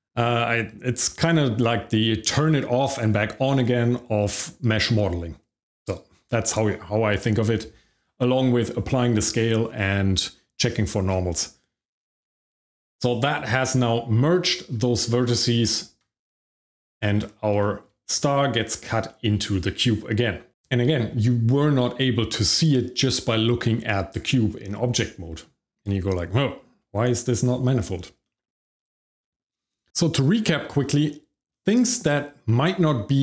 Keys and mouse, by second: 12.8 shift+middle click, 15.7 Tab, 17.6 shift+middle click, 18.6 shift+middle click, 19.0 middle drag, 28.2 middle drag, 28.6 shift+middle click, 28.8 middle click, 29.2 click, 29.5 shift+middle click, 30.3 shift+middle click, 30.8 middle drag, 31.5-32.0 middle drag.